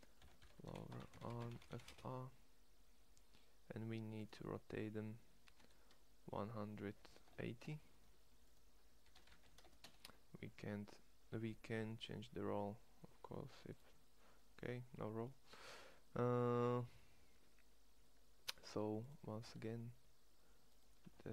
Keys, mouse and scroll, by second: 5.2 r, 8.8 r, 18.5 Tab, 19.4 Tab.